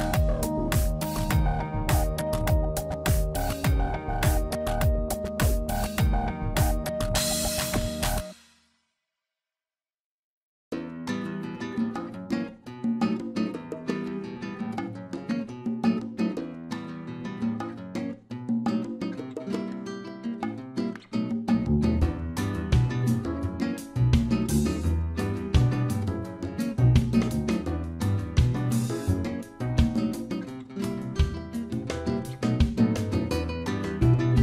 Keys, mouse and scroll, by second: 1.8 middle click, 3.2 click, 5.1 middle click, 6.7 Tab, 7.2 ctrl+a, 8.3 Tab, 8.5 click, 9.0 shift+click, 9.6 shift+middle click, 10.2 shift+click, 11.1 scroll up 1, 11.7 scroll up 1, 11.7 i, 15.2 middle click, 16.0 shift+middle click, 18.7 alt+e, 23.7 Tab, 24.1-24.4 scroll down 2, 24.3 middle click, 27.5 shift+a, 30.5 scroll down 1, 30.7 shift+middle click, 31.1 middle click, 32.7 click, 33.8 shift+s.